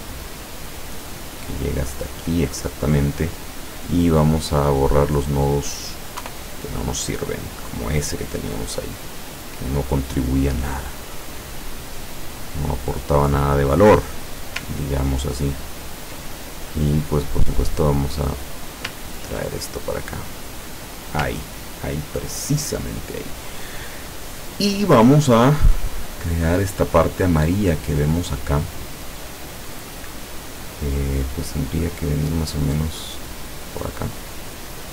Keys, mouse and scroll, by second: 2.0 click, 3.8 click, 5.5 click, 6.3 Delete, 7.8-10.5 drag, 11.2 click, 12.6 click, 14.8 ctrl+scroll up 2, 15.8 ctrl+scroll up 2, 16.4 ctrl+click, 17.0 click, 17.7-18.9 drag, 18.9-19.4 scroll down 2, 19.6 ctrl+click, 20.3 click, 20.7 click, 21.5 ctrl+scroll down 2, 26.1 click, 33.1 click, 34.5 click.